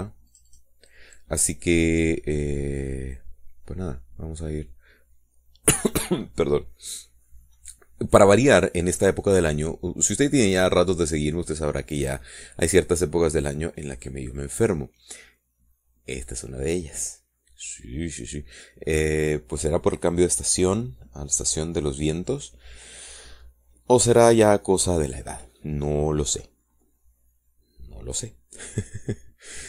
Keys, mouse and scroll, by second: 0.4 click, 1.7 click, 8.4 middle click, 9.0-13.0 drag, 13.3 middle click, 15.2-16.4 drag, 16.4 middle click.